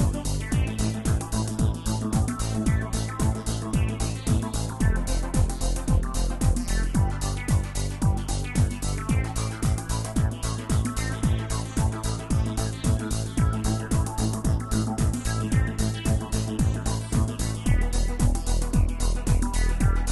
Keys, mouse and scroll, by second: 0.0-3.0 middle drag, 3.5 click, 5.8-7.3 drag, 8.7 scroll up 2, 9.8-14.2 drag, 14.2 Tab, 14.8 Tab, 16.5 click, 17.4-20.1 drag.